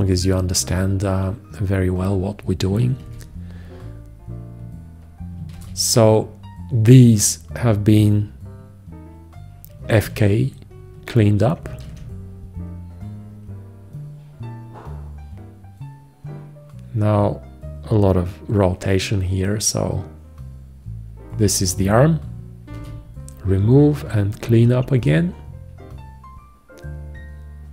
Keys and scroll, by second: 3.3 shift+x, 5.8 shift+x, 10.3 alt+q, 12.1 alt+q, 23.0 shift+x, 24.7 alt+q.